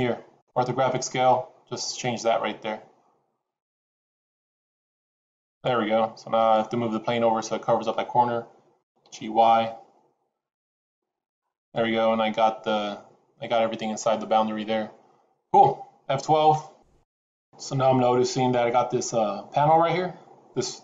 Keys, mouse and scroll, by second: 1.2 click, 6.3 click, 8.7 g.